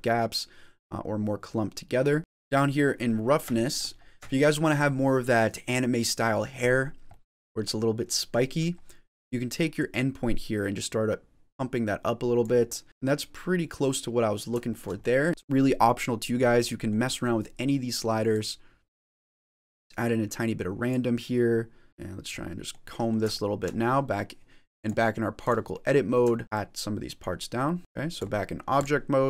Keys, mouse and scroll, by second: 0.2 click, 2.2 click, 2.2 middle click, 2.2 scroll down 6, 2.9 middle click, 3.5 shift+middle click, 3.8-4.4 scroll up 3, 4.2 shift+middle click, 6.7 scroll up 2, 7.0 middle click, 7.7-8.1 scroll down 2, 8.1 middle click, 9.6 click, 12.6 middle click, 12.8 ctrl+z, 12.8 click, 14.6 shift+middle click, 14.8 middle click, 15.3 shift+middle click, 15.3 scroll down 3, 16.5 middle click, 18.2 click, 21.9 middle click, 21.9 click, 21.9 scroll down 2, 22.3 middle click, 22.9 middle click, 23.2 shift+middle click, 23.7 scroll up 5, 24.0 scroll down 1, 24.7 click, 24.7-25.6 scroll down 2, 25.6 middle click, 26.2 shift+middle click, 26.4 click, 26.4 scroll up 1, 26.7 click, 27.5 middle click, 27.8 click, 27.8 scroll down 4, 29.2 middle click.